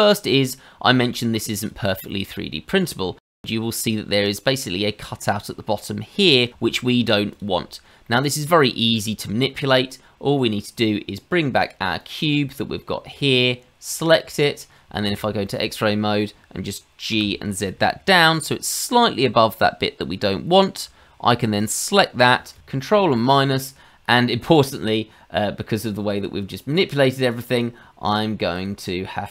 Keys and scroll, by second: 3.3 Tab, 3.3 shift+z, 6.5 shift+z, 15.0 shift+z, 17.1 g, 23.0 ctrl+KP_Divide.